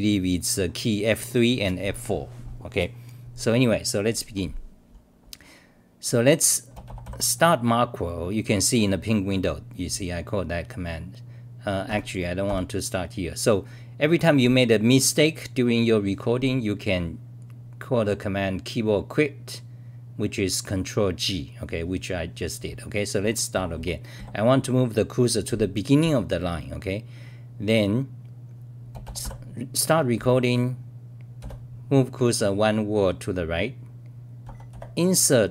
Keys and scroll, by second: 11.9 Home, 12.4 ctrl+g, 23.5 r, 24.1 d, 29.2 scroll, 31.4 v.